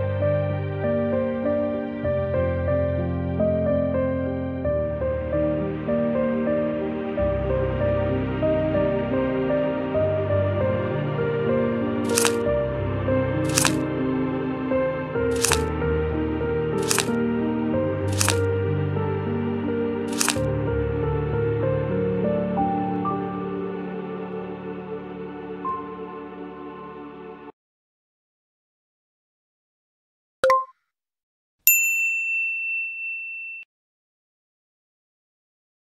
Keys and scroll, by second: 0.0-0.5 typing, 5.1 space, 5.1 v, 7.9 space, 8.9 f, 9.5 f.